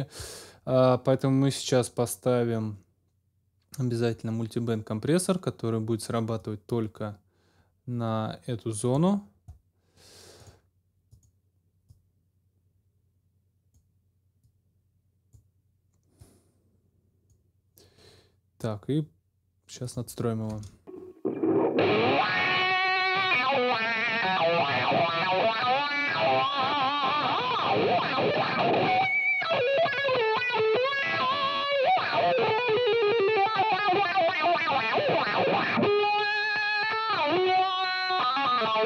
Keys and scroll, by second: 20.5 space.